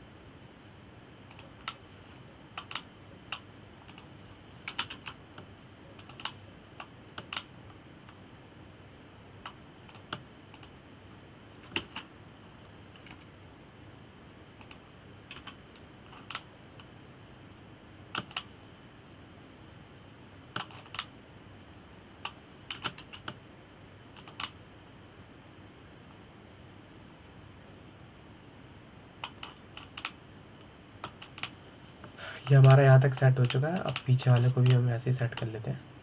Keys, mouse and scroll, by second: 0.9 click, 1.3 g, 3.4-5.6 middle drag, 5.6 click, 6.4 g, 7.7 click, 7.9-11.6 middle drag, 11.6 click, 12.2 click, 13.5 ctrl+KP_7, 14.8 g, 17.1 KP_1, 17.8 scroll down 3, 18.1-22.5 middle drag, 22.5 scroll up 3, 22.7-24.5 middle drag, 24.5 g, 26.1-29.1 middle drag, 31.1-31.8 scroll down 4, 31.8-32.9 middle drag, 32.9 scroll down 2, 33.1-36.0 middle drag.